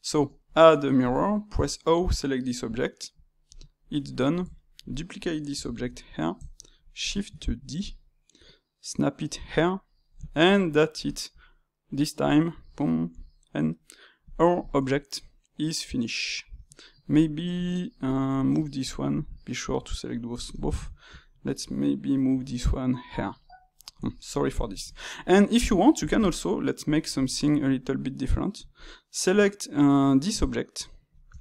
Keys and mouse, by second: 0.1 space, 1.9-3.5 drag, 3.7-7.3 middle drag, 7.3 shift+d, 9.6-13.1 middle drag, 13.1 n, 14.1 click, 14.9-17.1 shift+middle drag, 17.1 click, 19.1 click, 20.0 click, 20.6-22.3 ctrl+shift+middle drag, 22.3 g, 23.4-25.9 middle drag, 25.9-27.3 drag, 27.3-28.7 ctrl+middle drag, 28.7-30.2 drag, 30.2 Tab, 30.8 shift+middle click, 31.3 Tab.